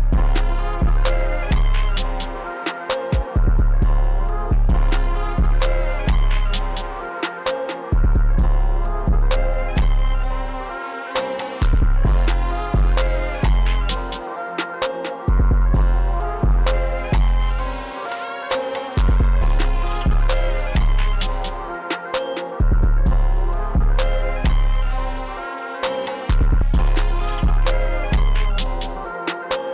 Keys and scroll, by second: 0.0 space, 0.4 p, 4.0 e, 4.4 space, 4.9 e, 5.5 super+x, 5.9 e, 7.0 super+b, 7.2 super+b, 7.3 super+b, 7.6 super+s, 7.9 e, 8.8 s, 9.8 super+s, 10.3-12.1 typing, 13.7 super+s, 15.1 s, 26.5 space, 28.9 Return.